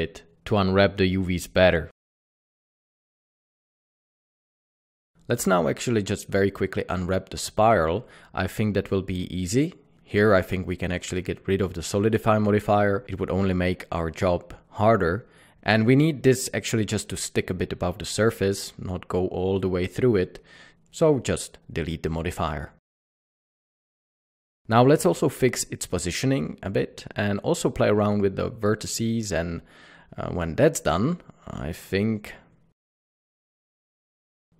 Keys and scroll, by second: 8.1 Tab, 9.4 Tab, 22.1 typing, 22.7 alt+a, 23.4 Tab, 23.5-25.0 typing, 25.9 Tab, 26.1 alt+a, 26.8 Tab, 27.0 g, 27.5 Escape, 28.1 o, 28.1 g, 29.9 Escape, 30.4 Tab, 30.5 Tab, 30.7 c, 31.3 g, 31.3 Tab, 31.5 alt+a, 33.5 Tab, 34.1 a.